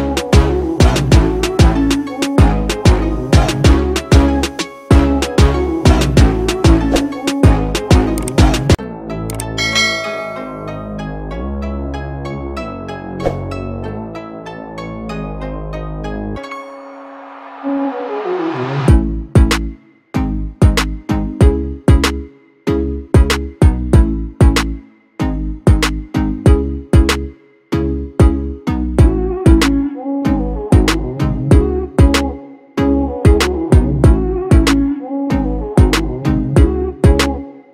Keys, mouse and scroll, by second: 10.6 double click, 12.7 double click, 25.9 Delete, 28.0 Delete.